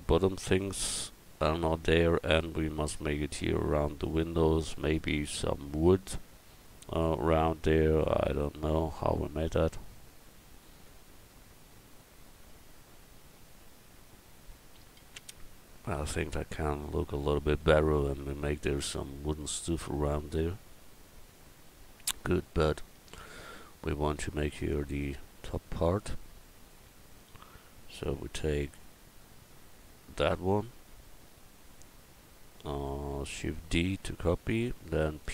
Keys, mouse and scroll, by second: 21.7 middle click, 23.2 middle click, 24.5 click, 25.0 Tab, 26.7 a, 27.3 a, 30.2 l, 33.9 shift+d.